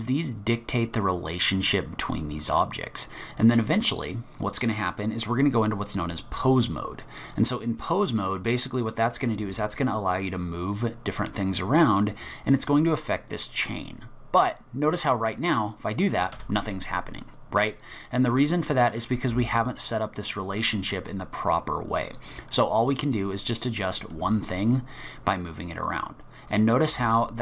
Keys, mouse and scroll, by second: 5.2 click, 8.8 click, 9.4 g, 17.6 click, 19.3 g, 23.4 click, 24.1 g, 26.4 click, 26.9 g.